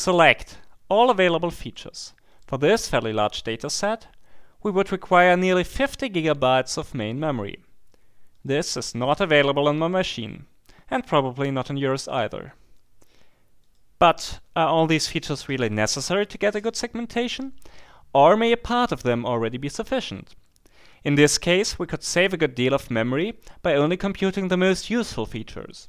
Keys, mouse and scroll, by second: 0.0 click, 0.9 click, 1.6 click, 2.3 click, 3.5 click, 8.3 click, 13.6 click.